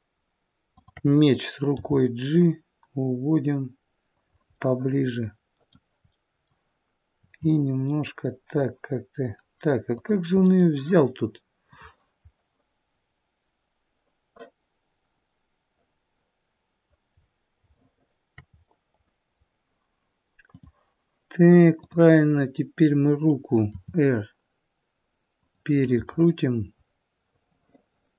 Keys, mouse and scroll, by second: 0.7 shift+click, 1.7 g, 4.5 middle click, 6.0 middle click, 7.2 r, 10.3 scroll up 1, 10.4 middle click, 11.7 click, 12.2-12.6 scroll up 1, 12.6 middle click, 12.6-13.6 scroll down 2, 17.0-17.4 scroll up 1, 17.6 shift+middle click, 17.6 scroll up 2, 18.5 shift+middle click, 20.6 click, 23.7 click, 23.7 r, 26.1 middle click.